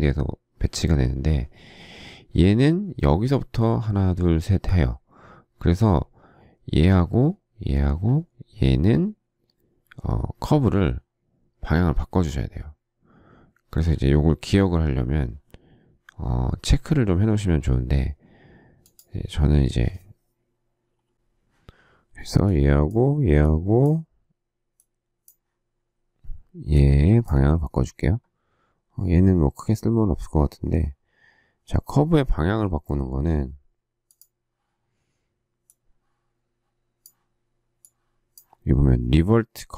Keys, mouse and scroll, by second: 21.1 e.